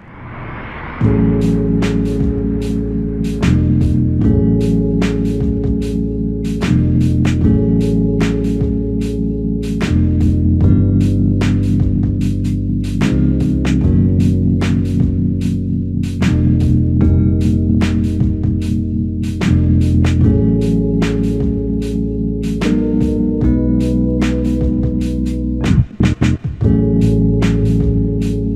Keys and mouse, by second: 0.4 alt+click, 2.1 double click, 4.1 f, 4.3 alt+click, 7.7 alt+click, 14.2 double click, 19.4 ctrl+i, 22.0 alt+click, 25.0 alt+click, 26.2 double click, 27.3 alt+click.